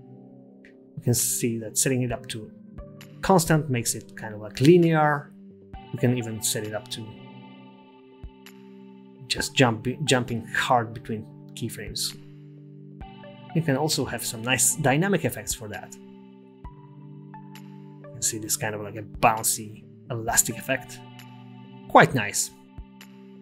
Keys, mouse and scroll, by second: 0.8 t, 5.4 t, 6.6 space, 10.3 space, 11.6 t, 17.0 space, 18.0 space, 18.4 space, 19.4 space, 21.1 space, 23.3-23.4 scroll up 9.